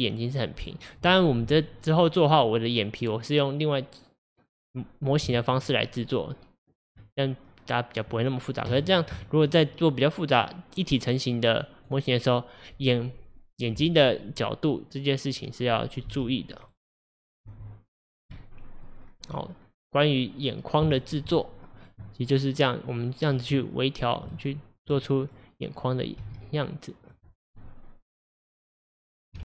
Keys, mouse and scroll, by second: 7.0 Tab, 8.9 click, 11.3 click, 12.4-15.5 scroll up 1, 16.1 g, 17.1 click, 17.5 g, 18.4 middle click, 19.0-19.4 scroll down 2, 19.4-22.9 middle drag, 22.9-23.8 scroll up 1, 23.8 click, 24.4-26.2 shift+middle drag, 26.2 g, 27.6-29.4 middle drag.